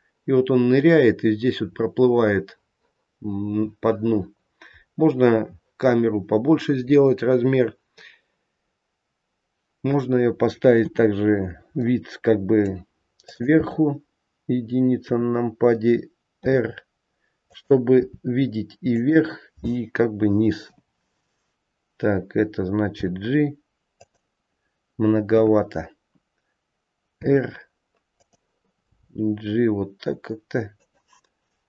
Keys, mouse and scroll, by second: 3.1-3.7 scroll up 3, 4.3-5.2 scroll down 1, 5.2-6.4 scroll down 5, 10.7 KP_7, 11.3-13.1 scroll down 3, 11.6 middle click, 13.1 click, 14.9 KP_1, 16.4 r, 17.9 g, 20.5 KP_0, 22.8 g, 25.2 KP_1, 27.1 r, 28.8 g.